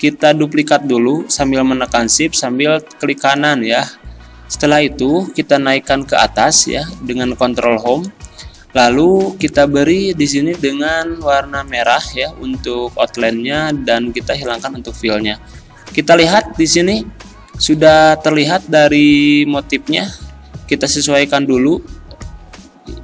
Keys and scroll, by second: 6.0 ctrl+Home, 7.7 ctrl+Home.